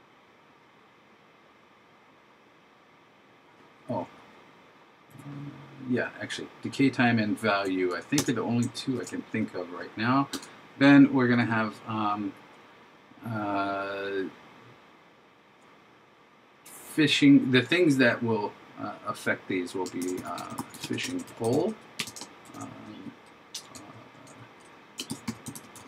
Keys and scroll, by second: 9.0 shift+0, 20.0 shift+f, 21.2 shift+p, 22.5 shift+9, 25.1 shift+n.